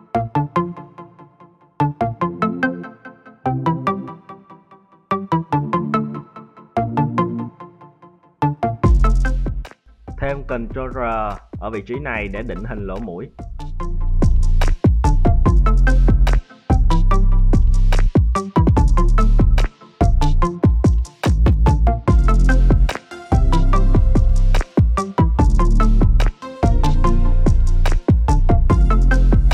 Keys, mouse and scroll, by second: 0.4 right click, 0.7 g, 1.6 right click, 1.8 g, 3.3 alt+right click, 3.9 e, 5.4 z, 6.5 `, 7.6 click, 8.7 f, 9.4 z, 9.9 middle click, 11.8 ctrl+r, 13.5-14.4 scroll down 4, 14.0 middle click, 14.4 `, 15.3 right click, 16.1 g, 18.9 right click, 18.9 scroll down 1, 19.2 g, 21.0 scroll down 3, 21.4 shift+middle click, 21.9 a, 22.4-24.1 middle drag, 27.5 right click, 28.2 middle click, 28.9 3, 29.2 right click.